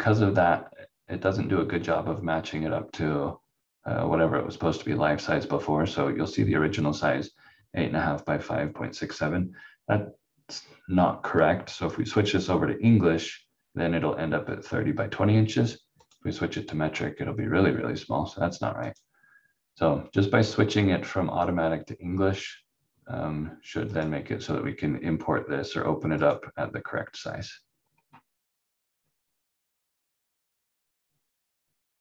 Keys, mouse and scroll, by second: 12.1 click, 16.0 click, 23.9 click, 27.7 scroll down 1.